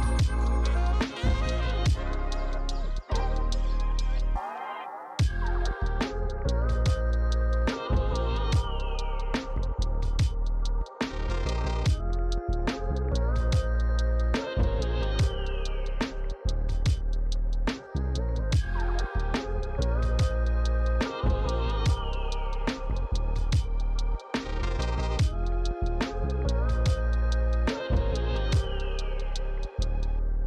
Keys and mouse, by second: 0.2 f, 0.3 click, 1.7 f, 1.9 click, 5.4 f, 7.9 click, 9.6 click, 10.3 shift+click, 10.7 shift+click, 10.9 f, 11.0 click, 11.4 f, 11.4 click, 14.7 click, 15.1 f, 15.2 click, 16.3 f, 16.4 click, 16.7 shift+click, 17.2 click, 19.1 click, 20.2 click, 21.0 right click, 21.1 click, 22.5 click, 23.6 click, 25.0 f, 25.9 click, 27.0 click.